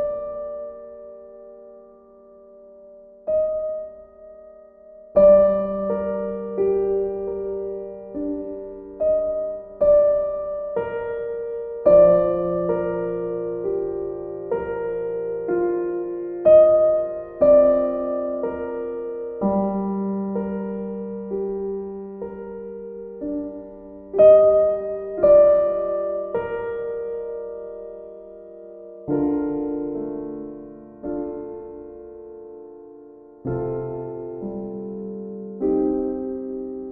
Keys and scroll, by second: 1.2 ctrl+z, 2.0 BackSpace, 6.6 ctrl+e, 17.0-18.1 typing, 22.7 ctrl+z.